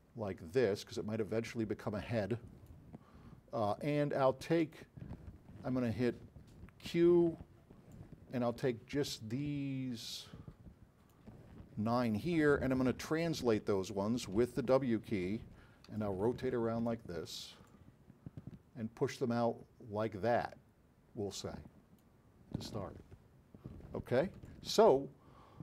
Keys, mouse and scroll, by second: 4.8 click, 7.1 q, 8.0-9.4 drag, 10.0-11.2 drag, 13.5 w, 16.0-17.1 alt+drag, 17.9 click, 24.7-25.6 alt+drag.